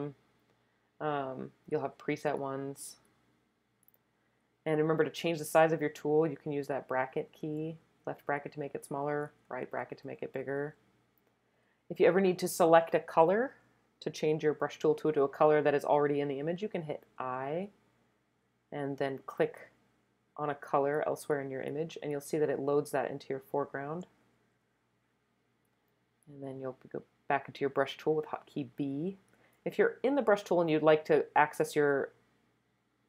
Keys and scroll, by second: 6.7 [, 6.9 [, 7.1 [, 7.4 [, 9.1-10.5 typing, 17.1 i, 25.7 b.